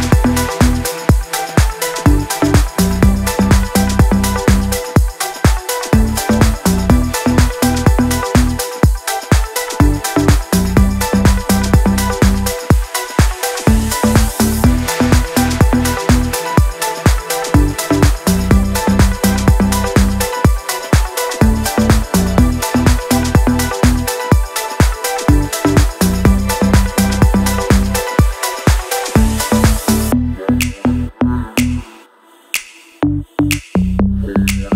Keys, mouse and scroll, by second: 1.3-3.5 drag, 3.5 ctrl+Page_Up, 5.1 ctrl+Page_Up, 7.3 ctrl+Page_Down, 9.2-10.4 shift+drag, 10.4 Down, 11.3 Up, 12.7 shift+click, 13.5 Down, 16.6 Down, 16.9 shift+click, 17.7 Down, 18.7 shift+click, 19.1 c, 19.3-21.5 drag, 21.5 click, 23.4 shift+Page_Up, 23.7 click, 23.9 right click, 24.1 click, 24.9-26.7 drag, 26.7 click, 32.0 click, 34.3-34.7 scroll down 1.